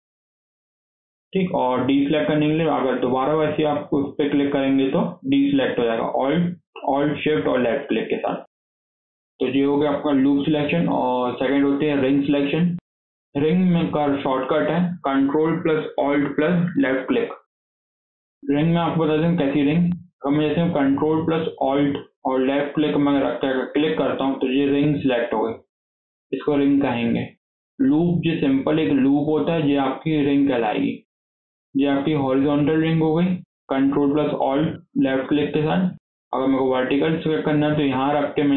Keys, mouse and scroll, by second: 1.1-1.6 scroll down 1, 1.6-2.8 scroll up 4, 2.8 alt+shift+click, 3.5 alt+shift+click, 4.2 alt+shift+click, 4.7 alt+shift+click, 5.2-8.3 middle drag, 8.3 alt+shift+click, 9.0 KP_7, 9.6 scroll down 3, 9.8 shift+middle click, 10.2 scroll down 2, 10.4-10.8 shift+middle drag, 10.8-11.2 scroll up 3, 11.2-12.2 shift+middle drag, 12.2 scroll up 3, 12.4 shift+middle click, 12.8 scroll down 2, 13.0-16.8 shift+middle drag, 17.8 shift+middle click, 18.2 scroll up 2, 18.5 shift+middle click, 18.8 scroll down 1, 18.9 shift+middle click, 19.7-20.0 scroll down 1, 23.5 ctrl+alt+click, 32.9 scroll down 1, 33.1 shift+middle click, 33.7 scroll up 2, 33.9 shift+middle click, 34.8-35.5 scroll up 1, 35.5 shift+middle click, 35.9 scroll up 1, 36.2 shift+middle click, 36.5-38.5 scroll up 3.